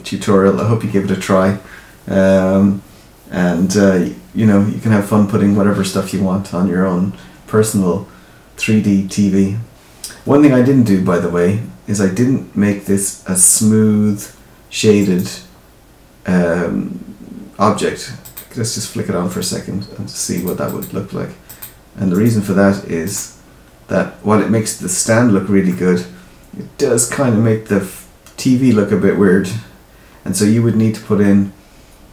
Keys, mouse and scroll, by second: 14.9 right click, 19.2 right click, 20.6 click, 21.4 click, 22.0 right click, 24.0 scroll up 1, 25.6 middle click.